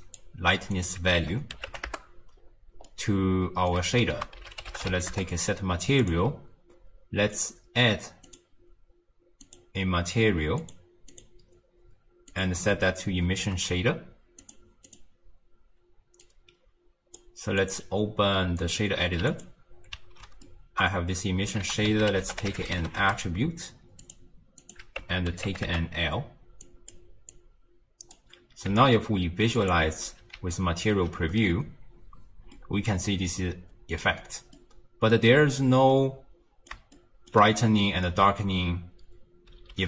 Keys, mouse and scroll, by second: 0.7-2.8 drag, 2.8-4.1 middle drag, 4.1 ctrl+a, 8.3 click, 9.4 click, 10.6 click, 11.1-19.2 drag, 19.2 q, 20.4-21.6 middle drag, 21.6 ctrl+a, 22.2 t, 24.6-26.6 drag, 27.3 click, 28.7 z, 30.3 d, 30.5 right click, 30.9 d, 32.5-35.4 middle drag, 35.4-35.9 scroll down 1, 35.9-39.7 middle drag, 39.7 shift+space.